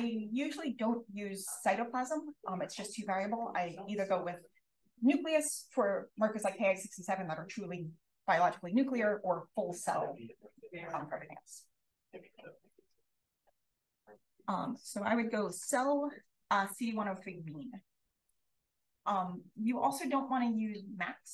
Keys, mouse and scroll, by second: 2.8-3.4 scroll up 1, 3.4-11.5 scroll up 1, 11.5-12.7 scroll up 1, 12.7 click, 13.1-13.6 scroll down 1, 13.6-14.9 scroll down 1, 14.9-16.1 scroll up 1, 16.1-18.7 scroll up 1, 18.7-19.7 drag, 18.7-19.6 scroll up 1, 19.6-21.3 scroll up 1.